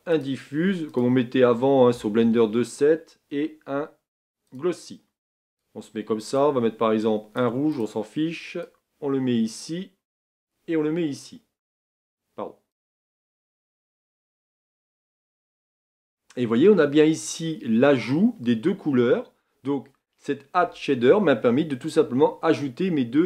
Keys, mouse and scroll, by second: 15.4-23.2 middle drag.